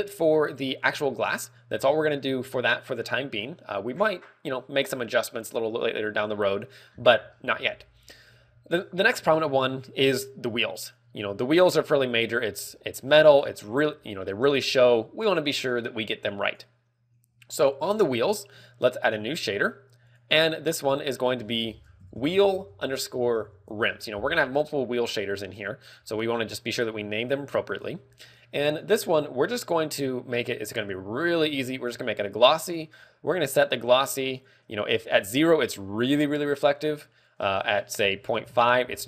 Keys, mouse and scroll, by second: 1.5-3.0 scroll down 3, 1.8 middle click, 3.9 middle click, 4.4 scroll up 4, 5.2 middle click, 5.9 scroll down 3, 11.9 right click, 12.7-13.3 scroll up 8, 13.5-14.0 scroll down 6, 14.5 shift+middle click, 14.9-15.2 scroll up 2, 19.8 click, 20.5 click, 21.6 click, 26.0 shift+middle click, 26.5 scroll up 1, 27.7 shift+middle click, 28.5 ctrl+w, 29.7 scroll up 1, 31.3 click, 32.5 click, 34.8 ctrl+click, 37.7 ctrl+click.